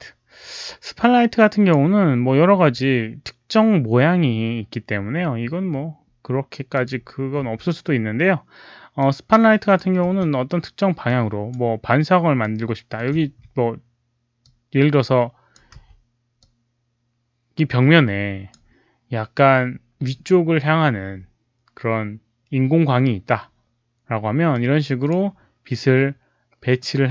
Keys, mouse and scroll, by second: 0.4-1.6 drag, 6.7 click, 7.4 w, 8.9 click, 10.0 e, 11.0 click, 12.3 middle click, 13.2 z, 14.3-15.4 drag, 15.7 w, 16.3-18.4 drag, 20.6-21.3 typing, 20.8 click, 20.8 middle click, 22.8-24.5 typing, 23.1 click, 24.4-25.0 drag, 26.7 click.